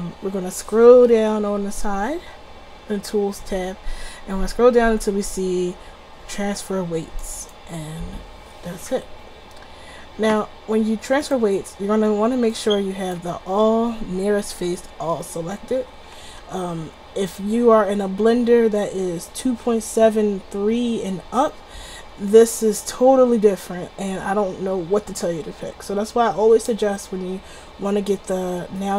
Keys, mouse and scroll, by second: 1.3-7.3 middle drag, 7.3 click, 9.6-12.9 middle drag, 12.9-14.2 drag, 15.0-16.0 middle drag, 16.2-19.5 middle drag.